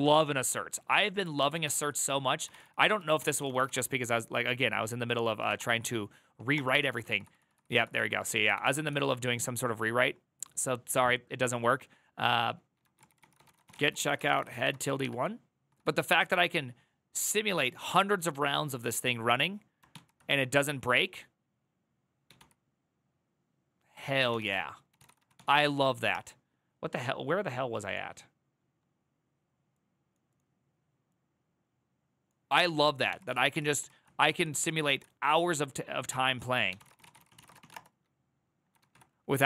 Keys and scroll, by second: 1.1 alt+[, 1.4 alt+{, 2.2 ctrl+c, 2.3 ctrl+c, 2.4-3.9 typing, 4.9-7.2 typing, 6.3 Return, 7.3 ctrl+-, 7.4 ctrl+-, 7.5 ctrl+-, 7.7 ctrl+-, 7.8 ctrl+-, 8.0 ctrl+a, 8.3 [, 8.5 ctrl+u, 12.7 ctrl+c, 12.8 ctrl+c, 12.8-15.2 typing, 15.7 ctrl+-, 19.6 ctrl+c, 19.8 ctrl+n, 21.7-22.6 typing, 24.0-25.6 typing, 25.8 Return, 32.8 ctrl+c, 33.2 ctrl+c, 33.4 ctrl+c, 33.5 ctrl+c, 34.0 q, 34.3 ctrl+c, 36.2-39.0 typing.